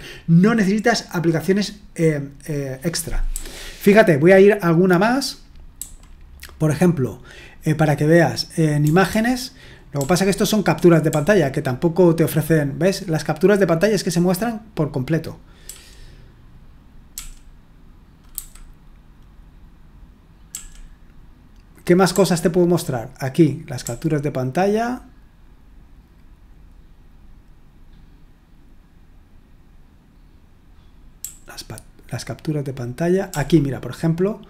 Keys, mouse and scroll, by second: 3.3 h, 5.7 h, 8.8-10.0 typing, 11.1 typing, 14.0 j, 15.7 k, 17.1 k, 18.4 h, 20.5 k, 22.1 k, 31.2 k, 33.3 l.